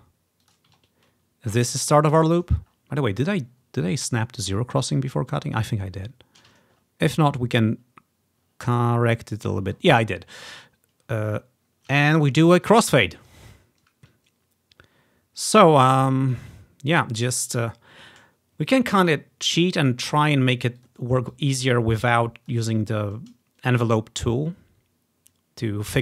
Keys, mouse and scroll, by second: 0.5 click, 0.9-1.7 ctrl+scroll up 1, 1.8 click, 2.8-3.1 ctrl+scroll up 3, 3.6 scroll up 2, 4.0 scroll down 2, 4.4 scroll up 2, 5.5-6.8 ctrl+scroll down 7, 6.8 ctrl+scroll up 2, 7.4-8.0 scroll up 4, 8.4 scroll up 2, 9.8-10.5 scroll down 8, 11.1 scroll up 2, 11.7 ctrl+scroll down 1, 12.3 ctrl+scroll up 1, 13.0 scroll down 2, 15.6 click, 17.0 click, 17.5-20.6 drag, 20.9 click, 21.4-22.6 drag.